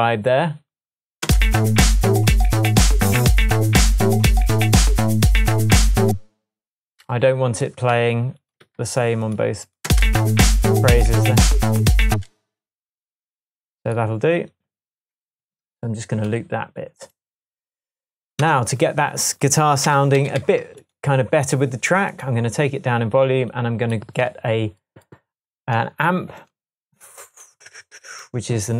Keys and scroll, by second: 1.3 space, 6.1 space, 8.0 super+c, 8.7 super+v, 10.5 space, 12.1 space, 18.4 BackSpace, 19.9 super+d.